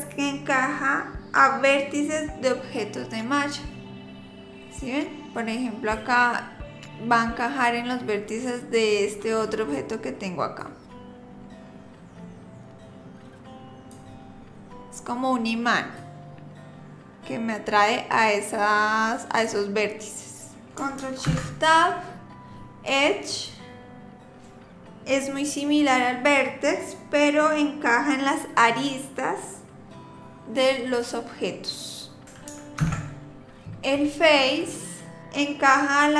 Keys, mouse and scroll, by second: 3.8 click, 10.6 click, 16.0 click, 21.3 ctrl+shift+Tab, 32.8 ctrl+shift+Tab.